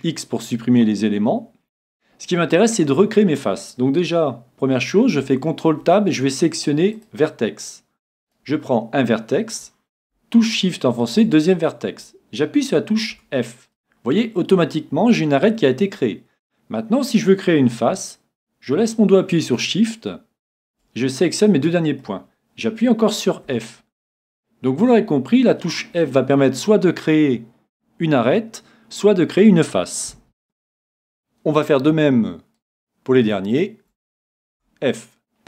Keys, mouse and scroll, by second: 8.2-10.3 right drag, 11.0-13.0 right drag, 13.1 f, 14.1-16.0 middle drag, 19.5-22.4 right drag, 21.5-23.9 middle drag, 23.5 f, 24.1-26.0 middle drag, 30.4 middle click, 32.5-35.2 right drag, 34.5 f, 35.0 middle click.